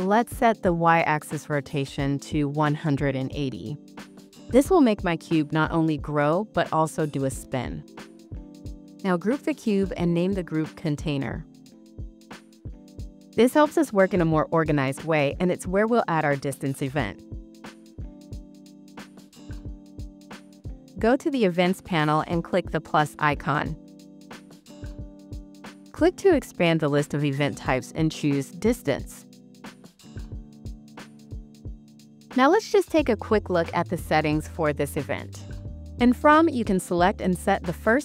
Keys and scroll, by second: 11.3 super+g.